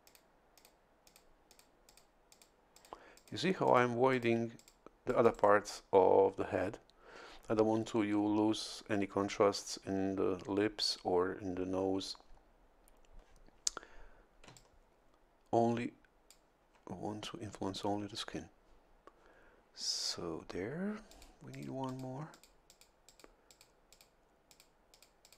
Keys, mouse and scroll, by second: 0.1 click, 0.6 click, 1.1 click, 1.5 click, 1.9 click, 2.3 click, 2.7 click, 3.2 click, 3.7 click, 4.1 click, 4.6 click, 5.1 click, 5.3 right click, 14.5 a, 14.6-16.5 drag, 21.1 click, 21.5 click, 22.3 click, 23.1 click, 23.5 click, 23.9 click, 24.5 click, 24.9 click.